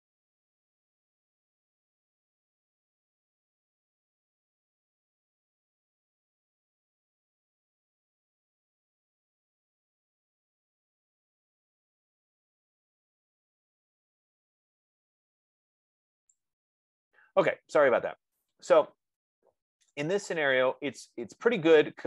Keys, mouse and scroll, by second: 20.4 right click.